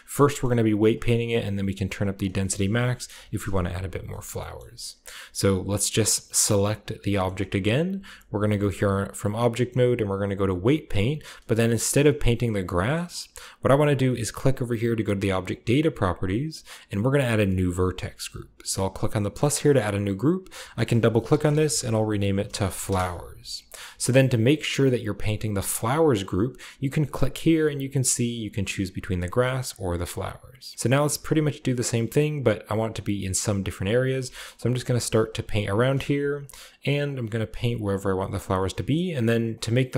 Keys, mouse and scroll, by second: 0.0-1.4 shift+scroll up 1, 1.4-3.0 drag, 1.9 right click, 2.2 right click, 3.0 middle click, 3.0 typing, 3.2 Return, 4.5-5.9 shift+middle drag, 5.9-8.3 right drag, 7.1-8.3 shift+middle drag, 8.4 shift+click, 10.2 click, 15.3 click, 15.8-16.9 drag, 18.8-20.3 drag, 20.3-22.0 drag, 21.1-23.2 typing, 25.2 click, 27.0 click, 28.5 click, 29.5 click, 31.6 click, 31.7 click, 31.9 click, 32.1 click, 32.5 click, 32.8 click, 33.0 click, 33.2-34.2 drag, 34.2 shift+middle click, 34.7 shift+click, 34.8 shift+middle click, 34.8 shift+click, 34.9 shift+middle click, 35.0 shift+click, 35.0 shift+middle click, 35.1 shift+click, 35.2 shift+middle click, 35.3 shift+click, 35.3 shift+middle click, 35.5 shift+click, 36.0 f, 36.4 click, 36.6 click, 36.7 click, 36.9 click, 37.0 click, 37.2-38.2 drag, 38.2 middle click, 38.3 click, 39.3 click, 39.5 click, 39.7 click.